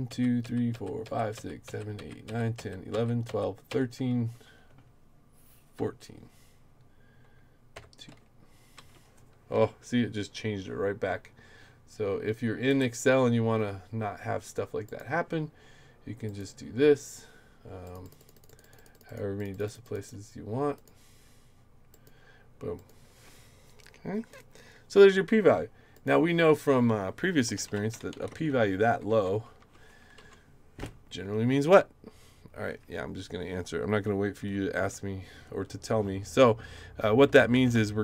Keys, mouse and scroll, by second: 0.0-3.7 typing, 5.7 2, 7.7 2, 8.7 Return, 9.5 Up, 12.7 right click, 14.9 click, 16.3 click, 17.8 click, 18.0 click, 18.2 click, 18.3 click, 18.5 click, 18.6 click, 18.8 click, 18.9 click, 19.1 click, 19.4 click, 19.5 click, 19.6 click, 19.8 click, 20.0 click, 20.7 click, 21.9 click, 22.8 click, 25.9 click, 27.3-29.1 typing, 29.6 Return, 30.2 Right, 37.3-38.0 typing.